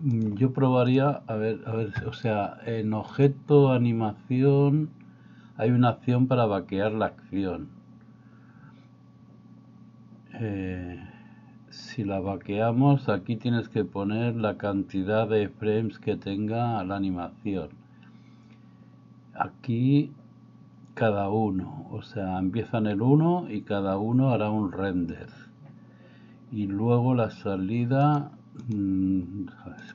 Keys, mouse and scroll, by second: 1.0 drag, 3.2-28.2 drag, 28.7 click.